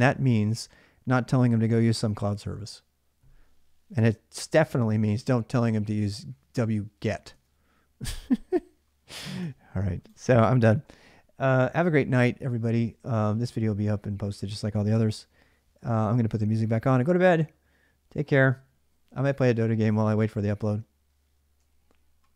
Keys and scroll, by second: 7.1 alt+Tab, 9.2 alt+Tab.